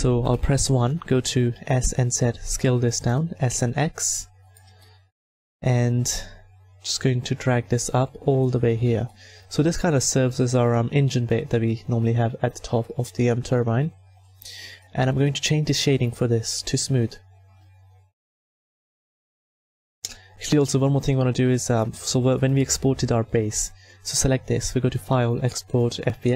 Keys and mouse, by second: 0.2 KP_1, 1.6 s, 3.3 s, 4.7-6.9 middle drag, 6.9-13.2 drag, 13.2-14.7 middle drag, 14.7-16.5 drag, 16.5-21.7 middle drag, 23.3-26.3 middle drag.